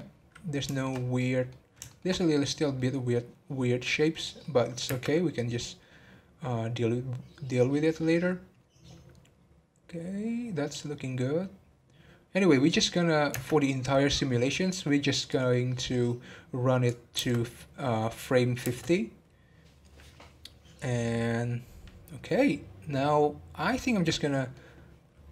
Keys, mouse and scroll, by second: 0.1 scroll up 1, 0.7 shift+middle click, 1.0 scroll up 1, 1.2-1.5 middle drag, 1.5 scroll down 2, 1.8-4.4 shift+middle drag, 4.4 scroll down 2, 4.8 space, 13.4 space, 15.3-17.1 drag, 17.1 space, 18.9 space, 22.3 scroll down 1, 23.9-25.3 middle drag.